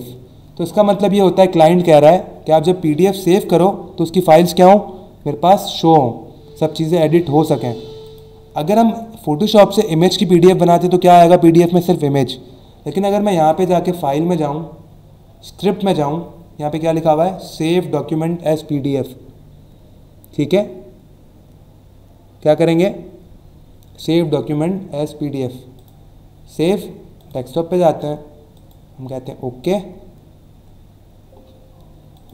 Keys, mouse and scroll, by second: 6.8 click, 8.0 click, 13.8 click, 15.4 click, 25.7 click, 27.2 click, 28.5 click, 32.1 click.